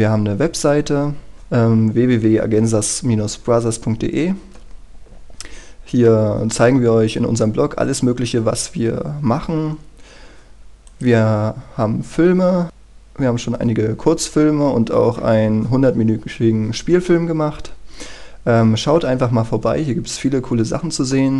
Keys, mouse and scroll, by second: 1.3 click, 4.9-8.9 scroll down 1, 8.9-11.1 scroll up 1, 11.1 click, 11.8 scroll down 1, 17.4-19.4 scroll up 1, 19.4-19.8 scroll down 1, 19.8-21.3 scroll up 1.